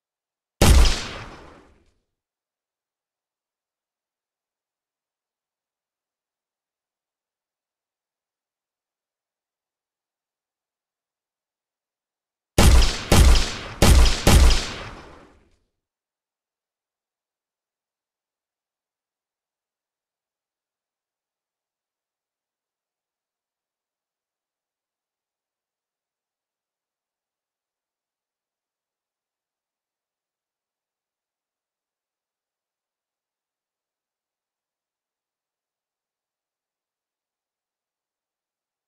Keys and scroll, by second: 1.1 w, 2.0 space, 4.0 space, 5.1 w, 6.5-8.6 typing, 10.9 d, 14.8 w, 15.5 a, 16.1 w, 16.4 space, 18.2 space, 19.7 space, 22.3 space, 22.8 w, 24.5 Escape.